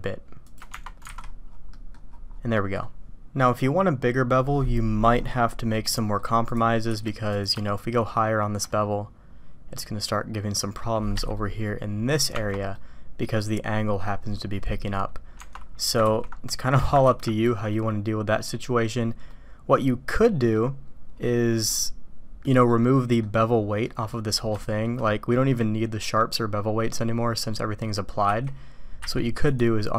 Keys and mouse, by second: 0.7 Tab, 1.1 alt+a, 1.7 drag, 2.5 drag, 4.4-5.0 drag, 5.8-6.2 drag, 11.4-12.1 drag, 12.7 click, 16.0 ctrl+x, 17.0 ctrl+z, 17.4 click, 19.2-20.5 drag, 21.6-22.4 drag, 22.6-23.2 drag, 23.8 click, 24.5 shift+middle click, 25.0 middle click, 26.3 middle click, 27.8 middle click, 29.0 q.